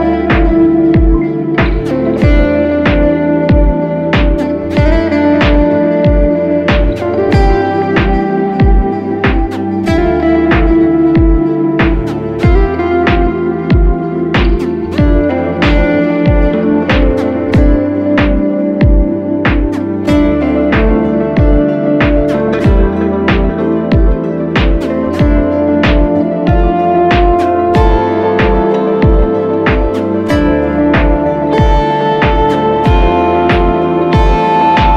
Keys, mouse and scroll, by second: 8.4 right click.